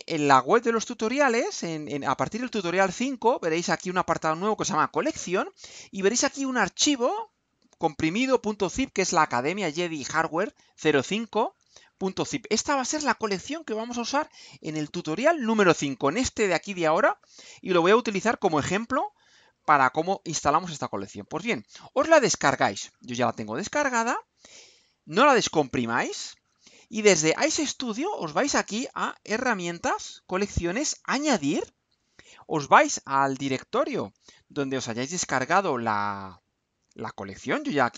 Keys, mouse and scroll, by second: 0.6-1.4 scroll down 3, 2.5-3.2 scroll down 2, 26.2 click, 31.4 click.